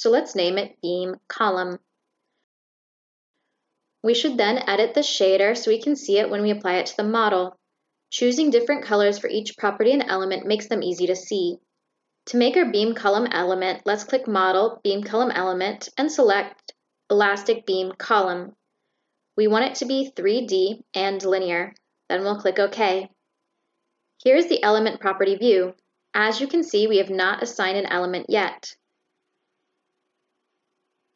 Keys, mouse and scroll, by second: 6.8 click, 8.1 click, 10.0 click, 10.8 click, 11.8 click, 13.1 click, 19.3 click, 20.5 click, 21.5 click, 24.2 click.